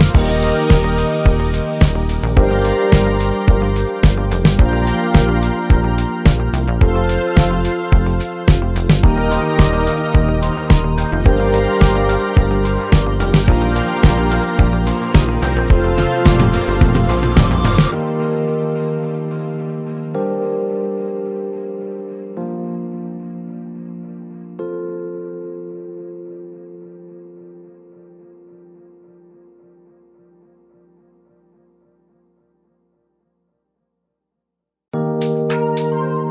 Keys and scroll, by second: 13.9 z, 15.2 space, 31.8 Caps_Lock, 32.7 t, 33.9 BackSpace, 34.7 Caps_Lock, 35.0 t.